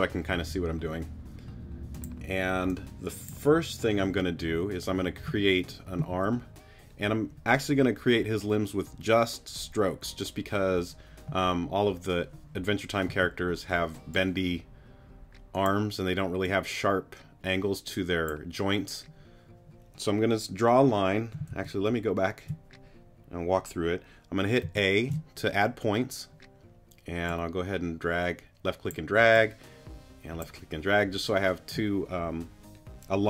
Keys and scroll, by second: 6.1 a, 13.1 a, 21.5 super+z, 24.6 a.